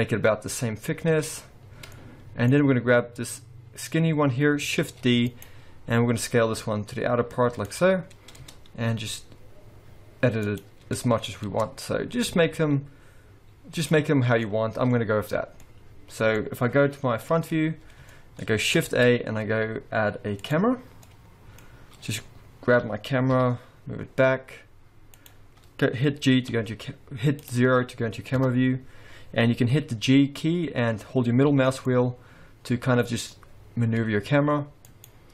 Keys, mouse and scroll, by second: 1.1 Tab, 1.5-1.9 scroll down 2, 1.9 middle click, 2.5-3.2 scroll down 1, 3.2 click, 3.7-4.7 scroll up 1, 4.7 scroll up 1, 4.8 shift+d, 6.1 s, 8.1-8.4 scroll down 2, 8.4 Tab, 8.5-9.0 scroll up 2, 9.0 s, 11.5 Tab, 11.8-12.2 scroll down 3, 12.2 scroll up 2, 12.6 s, 14.4 middle click, 15.6 middle click, 15.6-17.3 scroll down 2, 17.3 KP_1, 17.9 scroll up 3, 18.1 shift+middle click, 18.9 shift+a, 21.1 middle click, 21.7-22.1 scroll down 3, 22.9 g, 26.5 g, 28.4 KP_0, 31.5 g.